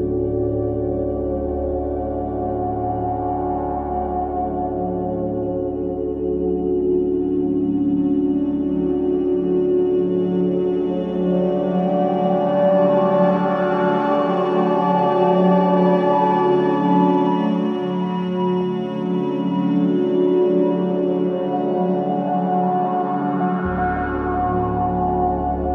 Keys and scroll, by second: 2.9 space, 9.3 ctrl+i, 19.5 ctrl+i.